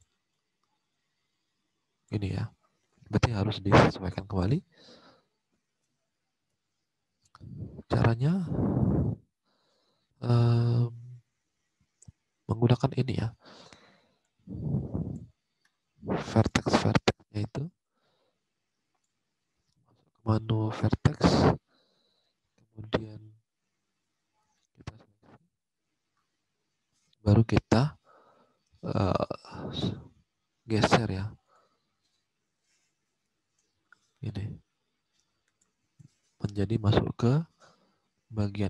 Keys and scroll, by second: 2.8 alt+Tab, 12.6 alt+Tab.